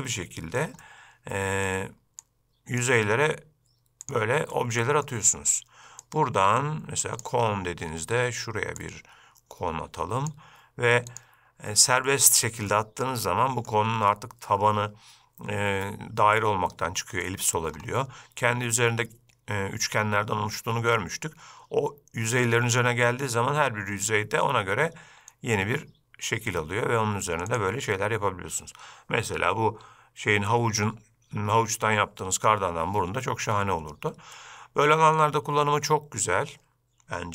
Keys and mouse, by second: 0.2-0.7 shift+middle drag, 0.9-2.1 middle drag, 2.3-4.2 drag, 4.6-5.1 middle drag, 6.5-7.6 drag, 11.2 drag, 12.2-12.6 middle drag, 12.8-13.1 shift+middle drag, 13.4-13.8 middle drag, 34.5-35.3 middle drag.